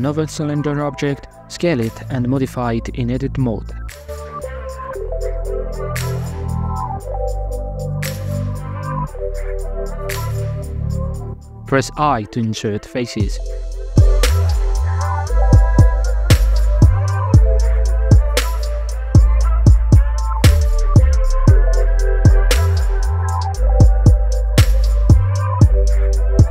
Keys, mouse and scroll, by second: 0.7 s, 1.8 middle click, 1.8 scroll up 7, 2.0 s, 3.9 click, 4.1 g, 5.0 s, 6.0 middle click, 6.1 s, 7.1 g, 7.9 scroll down 3, 8.1 middle click, 8.3 ctrl+a, 9.3 scroll down 2, 9.5 middle click, 10.0 click, 10.8 KP_1, 10.9 right click, 11.6 KP_1, 11.9 middle click, 12.1 i, 14.9-16.6 middle drag, 16.6 e, 19.5-20.1 shift+middle drag, 20.1 i, 22.8 middle click, 23.2 e, 25.0 scroll down 1, 25.1 middle click, 25.4-26.5 drag.